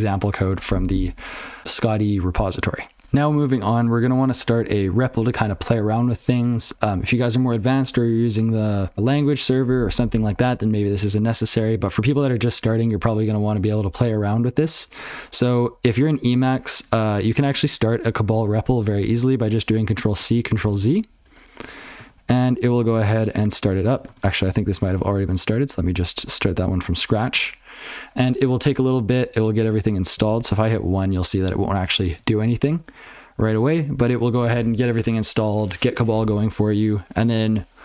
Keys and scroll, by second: 3.0 alt+x.